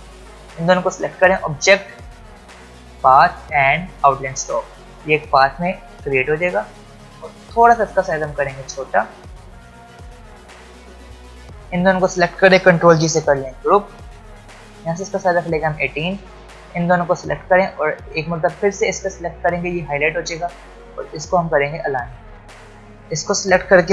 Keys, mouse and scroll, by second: 8.4 alt+scroll down 2, 11.1 click, 12.9 ctrl+g, 14.0 click, 21.1 click, 23.0 ctrl+z.